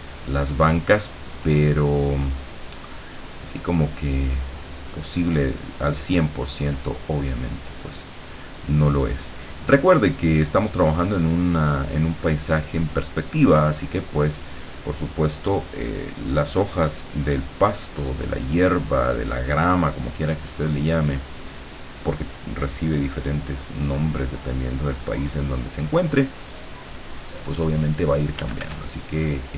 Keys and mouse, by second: 7.7-13.4 drag, 13.7-15.5 drag, 15.7-28.3 drag, 28.5 f, 29.0-29.5 drag.